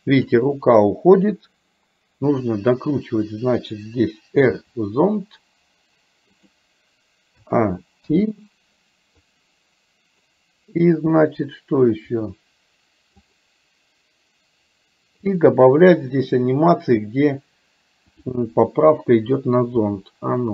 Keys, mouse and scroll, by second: 2.4 click, 4.5 r, 7.5 a, 8.2 i, 9.4 click, 13.3 click, 15.4 click, 19.8 r.